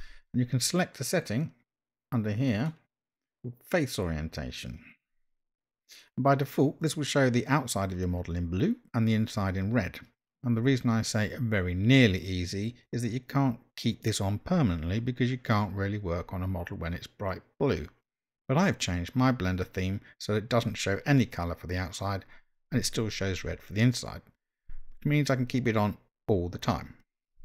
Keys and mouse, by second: 2.6-27.4 drag.